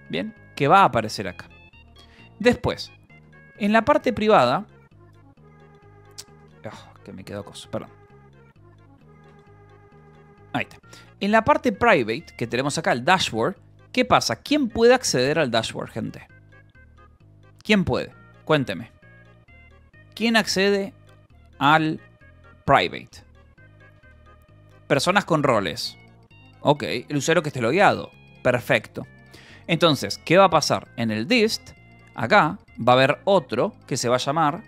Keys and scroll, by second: 0.4 j, 1.1 k, 2.6-4.6 typing, 4.8 Return, 6.1 k, 6.7 j, 7.2 k, 8.0 Return, 8.6-13.1 typing, 13.8 Return, 29.7 j, 30.4 k, 31.6-34.6 typing.